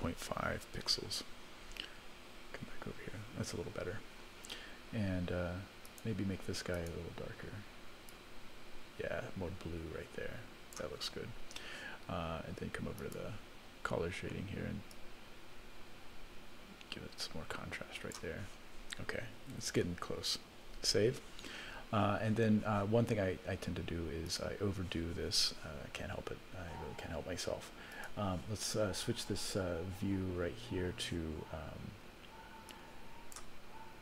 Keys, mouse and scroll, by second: 2.3 KP_0, 5.8 click, 6.7 click, 12.9 click, 14.9-18.2 drag, 19.5 alt+a, 20.8 ctrl+s, 24.2 click, 27.9 click, 32.7 click.